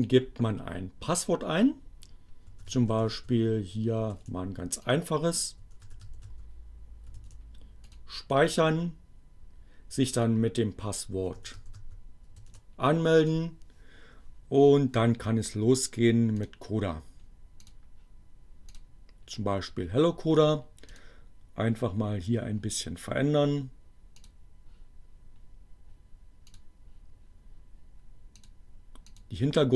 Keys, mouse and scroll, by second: 1.6-6.1 typing, 3.7 click, 6.1 click, 8.0 click, 8.6-10.3 typing, 10.5 click, 13.5 click, 15.0 click, 15.6 click, 18.6 click, 22.4 click, 25.2 click, 27.0 click, 28.4 click, 28.6-29.6 drag.